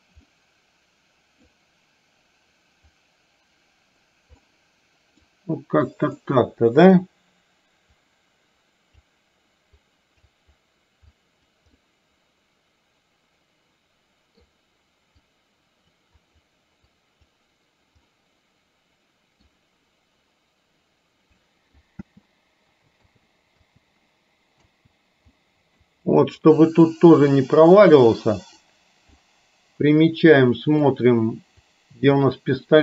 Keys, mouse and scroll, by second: 0.2-1.5 middle drag, 3.0-4.1 drag, 4.5 middle click, 6.2 middle click, 8.0-9.1 drag, 9.9 click, 11.2 click, 11.9-14.5 middle drag, 15.2 click, 16.9 click, 18.1-19.5 middle drag, 20.0-21.9 middle drag, 22.1 space, 23.1 space, 23.6 space, 24.7 space, 25.5 middle click, 26.5 click, 27.5 click, 28.2 click, 29.2-31.0 middle drag, 31.7 click, 32.6 click.